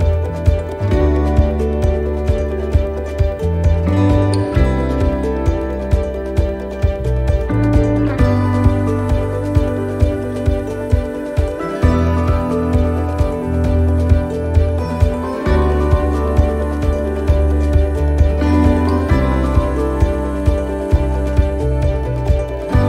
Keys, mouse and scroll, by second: 0.8 s, 3.5 middle click, 8.4 middle click, 10.5 right click, 10.8 middle click, 11.8 click, 16.7 click, 16.7 middle click, 17.3 shift+middle click, 17.7 middle click, 19.0 right click, 20.2 click, 21.8 middle click.